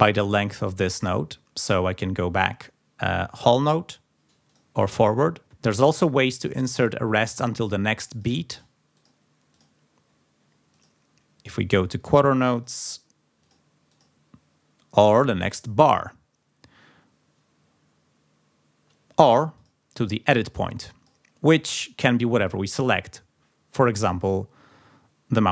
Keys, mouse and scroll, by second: 0.1 click, 0.8 click, 4.5 click, 8.1 click, 8.9 click, 9.5 click, 10.7 click, 12.5 click, 13.4 click, 13.9 click, 15.1 click, 19.6 click, 20.5 click, 22.7 click, 24.0 click.